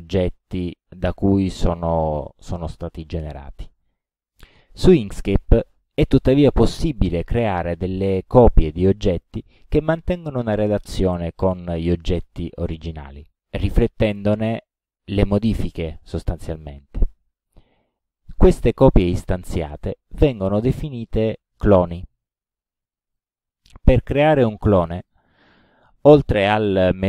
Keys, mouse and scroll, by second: 23.2 click, 25.1 click.